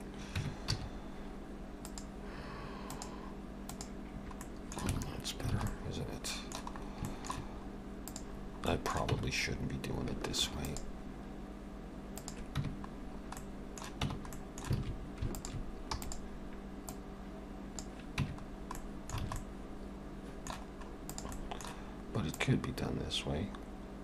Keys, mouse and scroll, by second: 0.4 Tab, 0.7 a, 1.9 click, 4.4 middle click, 4.9 Tab, 5.6 alt+a, 5.7 middle click, 6.8 scroll up 2, 7.1 shift+middle click, 7.6-8.1 scroll up 1, 8.1 click, 8.1 scroll up 1, 8.4-9.1 scroll down 3, 8.7 middle click, 9.1 Tab, 10.5 ctrl+r, 12.6 Tab, 13.4 middle click, 14.1 Tab, 14.4 middle click, 14.8 alt+a, 15.4 alt+shift+click, 15.9 e, 16.9 click, 18.2 Tab, 18.4-18.8 scroll down 3, 18.8 middle click, 19.3 alt+a, 19.4 middle click, 20.8-21.3 scroll up 2, 21.1 click, 21.3 middle click, 22.4 click.